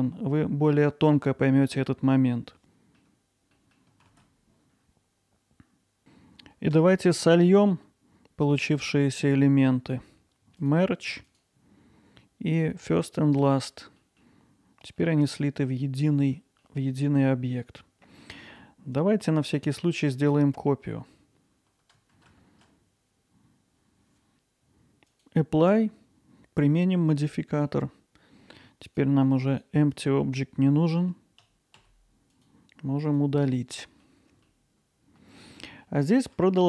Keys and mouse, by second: 3.7 middle click, 4.1 ctrl+b, 6.8 Tab, 10.6 click, 13.4 click, 14.1 middle click, 17.5 Tab, 18.5 Tab, 19.0-19.9 drag, 21.9 shift+d, 22.9 x, 25.1-27.8 drag, 27.8 middle click, 28.9 click, 31.5 z, 31.8 x, 34.9-35.6 alt+middle drag.